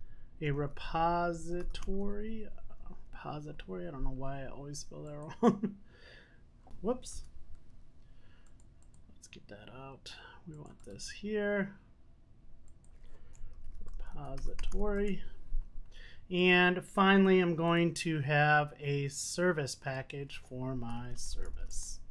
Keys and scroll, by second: 9.3 super+z.